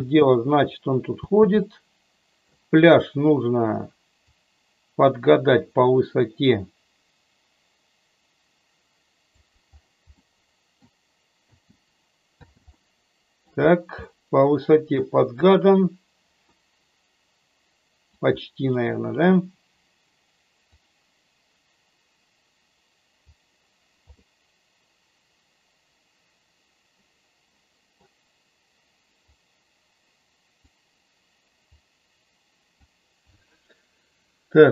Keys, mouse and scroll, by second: 1.1 space, 1.7 middle click, 4.3-9.3 drag, 10.1 middle click, 11.4 space, 12.3 space, 12.8-13.4 middle drag, 14.0-15.1 middle drag, 16.4-18.1 middle drag, 18.8 middle click, 20.7-23.3 drag, 24.1-27.9 middle drag, 29.3-30.6 drag, 31.7-32.8 drag.